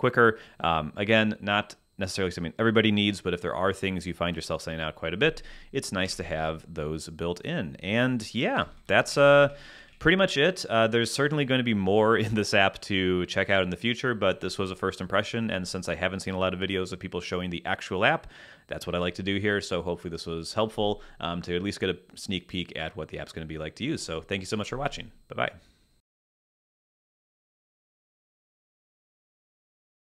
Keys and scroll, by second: 6.0 Escape, 8.5 Down, 9.1 Up.